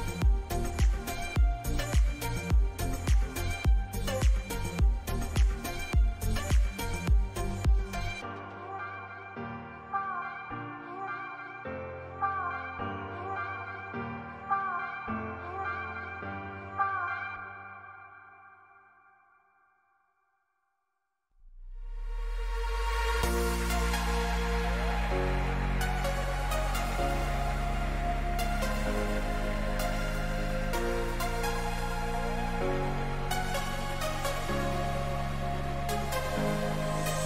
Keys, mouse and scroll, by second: 1.0 z, 2.5-4.6 drag, 3.2 a, 3.5 a, 4.6 b, 8.4-14.0 middle drag, 11.8 z, 17.6 Delete, 21.0-23.5 middle drag, 23.5 Tab, 24.9-29.3 drag, 29.9-31.9 middle drag, 32.8-36.0 drag, 33.8-37.2 middle drag.